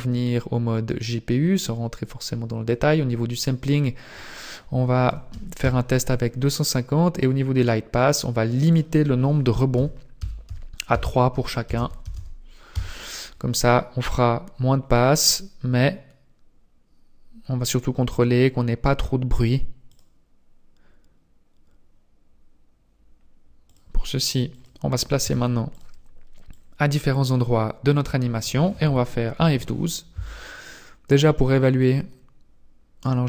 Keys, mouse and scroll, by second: 3.7 click, 7.1 click, 8.7 click, 14.2 scroll up 2, 19.9 click, 23.7 click, 25.2 ctrl+s, 26.5 click.